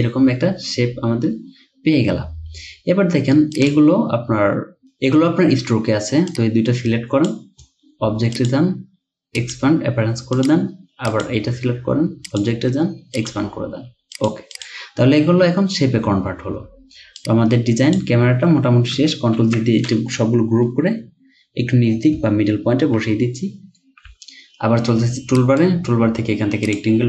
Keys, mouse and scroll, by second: 14.6 double click, 19.4 ctrl+g, 20.7 Down, 22.2 Down, 23.5 Up, 24.1 right click, 25.4 right click.